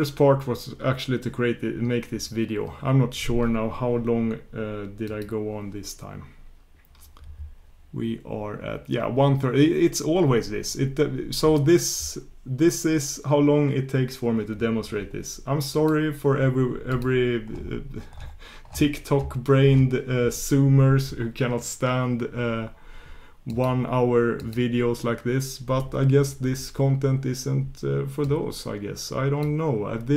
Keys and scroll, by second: 15.8 shift+super+q, 24.4 shift+super+q.